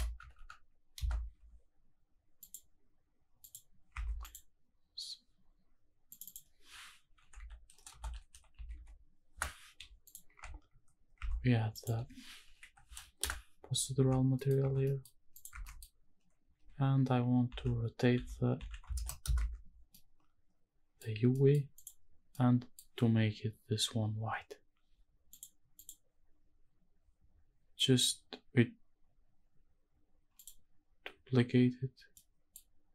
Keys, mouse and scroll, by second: 0.2 ctrl+KP_Subtract, 0.3 ctrl+KP_Subtract, 0.9 ctrl+KP_Add, 2.4 click, 3.4 click, 3.9 Tab, 4.2 click, 6.1-9.3 drag, 7.9 BackSpace, 10.1 click, 10.3 Tab, 11.1 Tab, 11.7-13.3 drag, 13.9 Tab, 14.3 middle click, 14.8 middle click, 15.3 click, 15.6 Tab, 15.6 middle click, 16.5-19.0 typing, 19.2 Return, 19.4 Tab, 19.9-21.0 middle drag, 21.1 scroll up 1, 21.3 middle click, 21.7 click, 22.3 middle click, 25.3-25.9 drag, 30.3 click, 32.1 middle click.